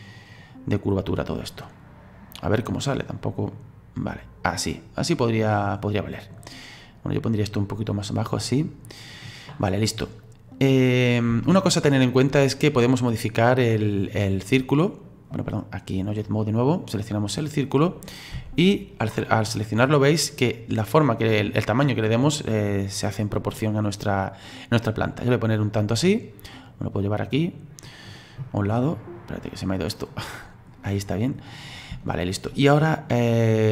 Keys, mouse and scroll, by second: 1.2 right click, 3.5-7.0 middle drag, 7.0 right click, 10.0-10.3 scroll down 2, 10.3-10.9 scroll up 2, 10.9-11.4 scroll down 2, 11.4-14.4 shift+middle drag, 14.4 right click, 16.2-17.6 drag, 17.6 right click, 18.3 s, 26.7-30.2 drag, 30.2-31.0 scroll down 7, 31.0-32.1 scroll up 10, 32.1 shift+middle click, 32.8 right click.